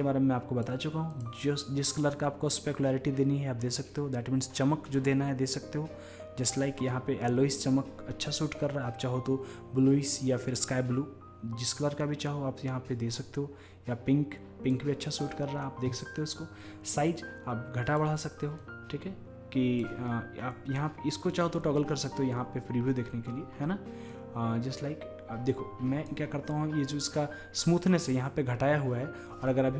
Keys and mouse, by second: 1.1-2.9 drag, 17.0-20.4 drag, 20.4-23.0 middle drag, 23.0 click, 24.2-26.0 drag.